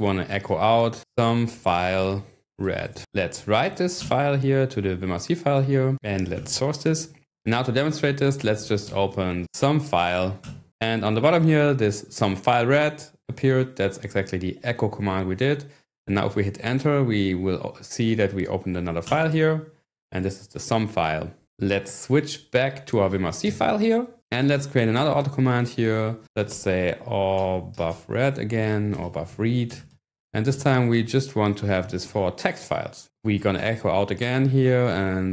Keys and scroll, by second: 0.0-4.0 typing, 3.0 Escape, 4.1 Return, 5.7-6.7 typing, 8.3-9.8 typing, 10.4 Return, 19.1 Return, 23.4 ctrl+6, 26.0-30.6 typing, 31.7-35.3 typing.